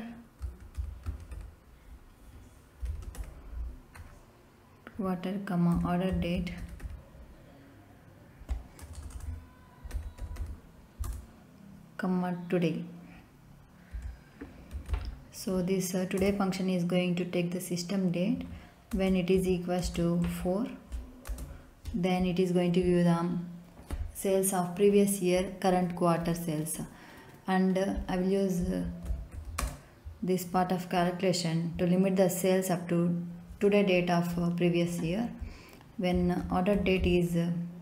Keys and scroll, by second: 0.4 q, 0.7 u, 1.0 a, 1.3 r, 2.8 t, 3.0 e, 3.1 r, 4.9 Right, 5.7-6.8 typing, 8.7 BackSpace, 9.9 r, 10.1 d, 10.3 e, 11.0 Return, 13.9 ', 14.7 t, 14.8 o, 16.1 Return, 18.3 Right, 18.9 space, 19.3 =, 19.8 space, 20.2 4, 21.2 space, 28.8 a, 29.0 n, 29.3 d, 29.5 space, 36.1 o, 36.4 r, 36.7 d, 36.9 e.